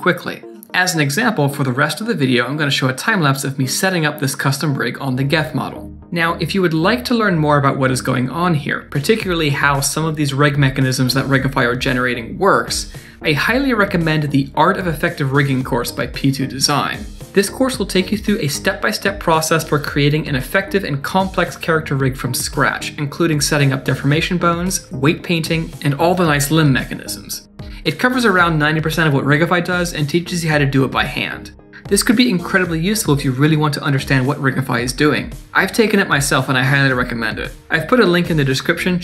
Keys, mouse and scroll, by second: 1.6 middle click, 1.9 scroll up 2, 2.1 middle click, 3.1 Tab, 3.4 click, 3.7 KP_Decimal, 4.0-4.6 scroll down 2, 4.3 Tab, 5.1 Tab, 7.2 click, 7.4 click, 7.6 Tab, 7.9 middle click, 8.8 click, 9.0 middle click, 12.6 click.